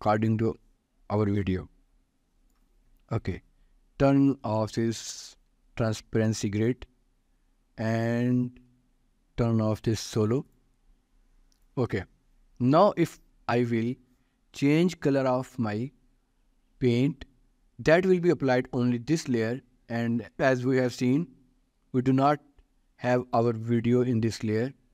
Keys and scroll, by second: 21.3 ctrl+s.